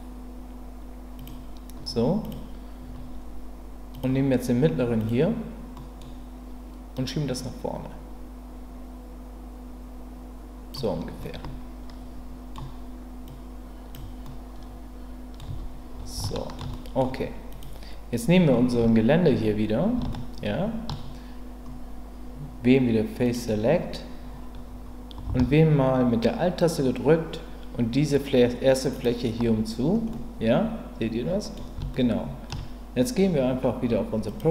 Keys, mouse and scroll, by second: 1.2 click, 3.9 click, 5.0 click, 5.8 middle click, 6.9-10.7 drag, 11.2-12.5 middle drag, 13.3 click, 14.2-15.4 middle drag, 15.4 Tab, 16.2-16.6 shift+middle drag, 16.7 middle drag, 18.8 Tab, 20.1 shift+middle click, 23.2 click, 29.0 alt+click, 30.1-31.5 middle drag, 31.9 shift+middle click, 34.3 click.